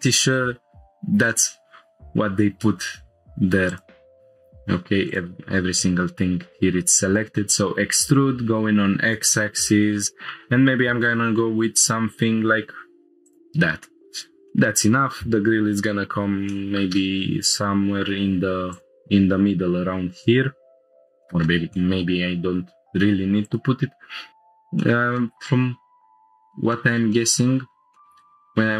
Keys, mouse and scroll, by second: 2.1-3.0 scroll up 1, 3.0-3.7 scroll up 1, 3.7 click, 4.2 shift+middle click, 4.2-4.5 scroll up 2, 5.1 click, 7.5 e, 7.7 x, 13.2-13.8 drag, 13.8-14.3 scroll down 1, 14.5-15.1 middle drag, 16.5 middle click, 18.7 click, 20.8 scroll down 1, 21.0 middle click, 21.2 shift+middle click, 21.7 middle click, 23.4 click, 24.3 Tab, 24.8-25.1 shift+middle drag, 25.2-26.6 middle drag, 26.7-27.0 shift+middle drag, 27.1 middle drag, 27.5-27.9 scroll up 2, 27.9 shift+middle click, 28.0 Tab.